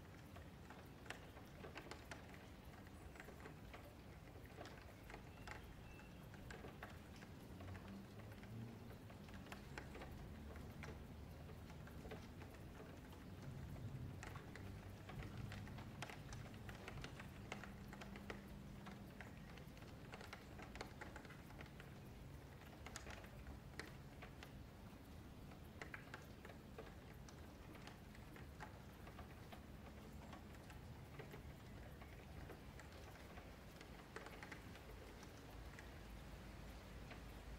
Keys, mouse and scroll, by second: 1.3-2.1 scroll up 1, 2.1-2.6 scroll up 3, 3.3 middle click, 3.8 scroll down 1, 4.0 shift+middle click, 4.6 click, 10.0 click, 10.9-13.9 middle drag, 13.9 ctrl+KP_Add, 17.8 middle click, 18.8 f, 19.3 Tab, 19.4 click, 20.1-20.8 middle drag, 20.8 scroll up 1, 21.1 click, 21.4 Tab, 21.8 2, 22.0 alt+click, 22.7 middle click, 23.4 click, 24.2 middle click, 24.6 Tab, 25.0-28.8 shift+middle drag, 28.8 click, 30.6-31.7 middle drag, 31.7 scroll up 2, 31.8-32.3 middle drag, 32.3 Tab, 32.7-37.5 middle drag, 33.1 scroll up 1, 34.3 scroll down 1.